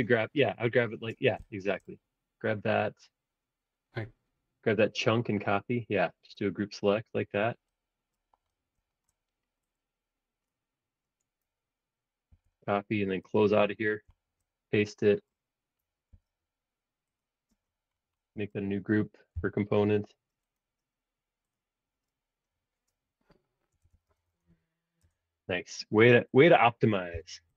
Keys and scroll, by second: 12.3 super+c, 13.1 Escape, 13.2 space, 16.1 super+v, 17.5 space, 19.3 l, 23.5-24.9 typing, 25.0 Return, 27.1 l.